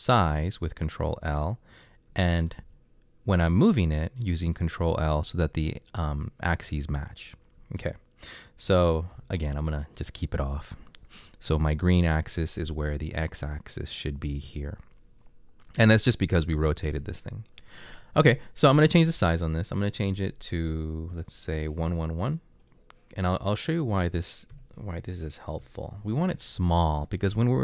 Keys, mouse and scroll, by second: 9.2 ctrl+l, 24.5 1, 25.6 Return, 26.6 typing.